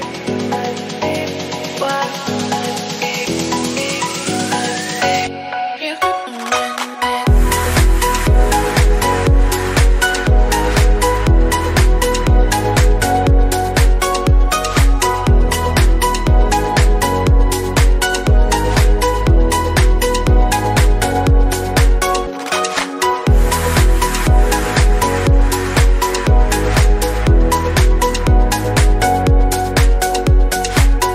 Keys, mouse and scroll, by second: 2.6 click, 3.3 middle click, 3.9 click, 7.4 o, 8.7 scroll down 1, 8.9-10.4 middle drag, 10.4-11.0 scroll up 2, 11.0-11.4 scroll down 2, 11.4 shift+middle click, 11.9-12.5 scroll up 4, 12.5 shift+middle click, 13.1 click, 13.3 click, 23.4-24.6 scroll down 2, 24.6-25.0 scroll down 1, 25.0-26.3 drag, 26.3-26.9 scroll down 1, 26.9 scroll down 2, 27.1 click.